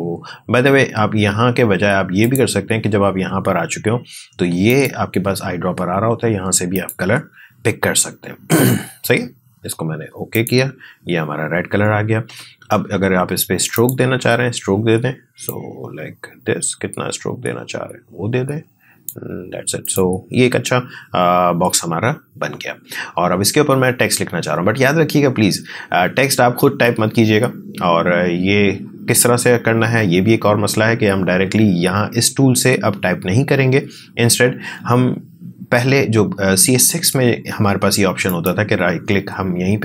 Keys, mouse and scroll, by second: 2.2 click, 4.7 click, 10.3 click, 13.7-19.8 drag, 38.2 right click.